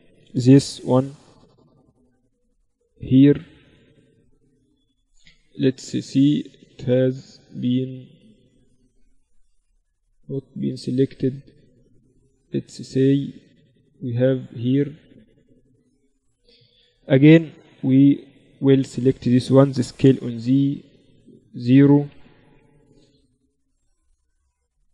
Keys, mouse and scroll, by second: 0.3 c, 3.1 z, 3.7 click, 4.3 z, 4.8 middle click, 5.9 z, 7.1 z, 9.4 z, 11.5-13.9 right drag, 12.3 a, 13.9 click, 16.1 KP_1, 17.1 z, 19.1 s, 21.5 s, 23.5-24.9 right drag, 24.1-24.9 drag.